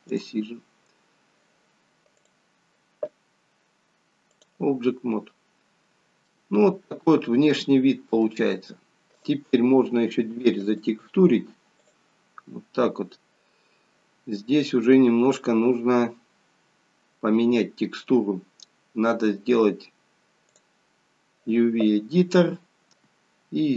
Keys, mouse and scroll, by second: 0.2 click, 0.8-3.0 scroll down 1, 3.0 scroll down 2, 3.2 click, 5.0-5.5 scroll up 4, 6.3 shift+middle click, 7.3-8.2 scroll down 3, 8.2 middle click, 9.1 click, 10.6 click, 15.6 scroll up 2.